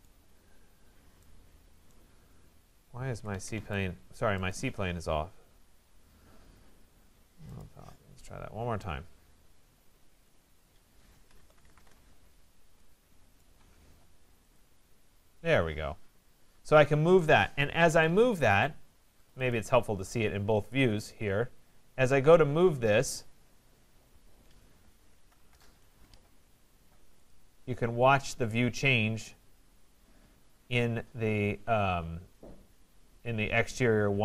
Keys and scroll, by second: 3.0 Escape, 11.7 Return, 17.8 Escape, 25.5 Return.